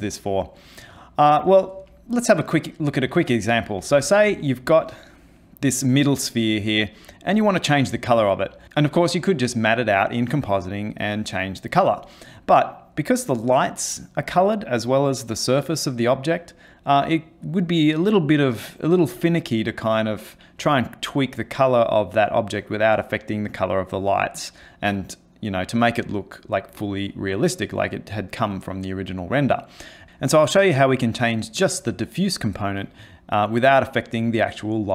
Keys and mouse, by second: 4.0 ctrl+space, 30.0 middle click.